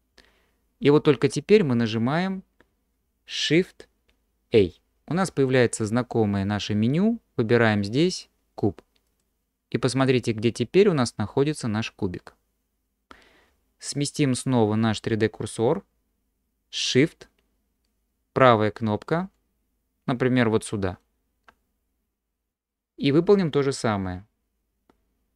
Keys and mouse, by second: 4.6 shift+a, 19.4-21.1 shift+drag.